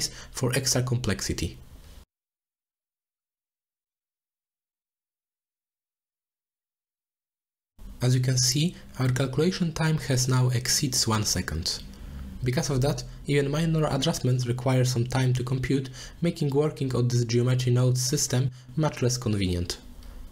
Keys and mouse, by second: 1.5 click, 1.8 middle click, 2.3 click, 2.4 middle click, 2.6 ctrl+shift+d, 3.1 click, 3.5 shift+click, 4.6 click, 4.9 click, 5.4 middle drag, 5.7 click, 5.8 shift+d, 6.7 click, 7.4 click, 8.3 drag, 8.8-9.6 drag, 10.9 click, 11.4 middle click, 12.5-14.3 drag, 15.4 middle click, 17.8 middle click, 18.4 click, 19.4 shift+a.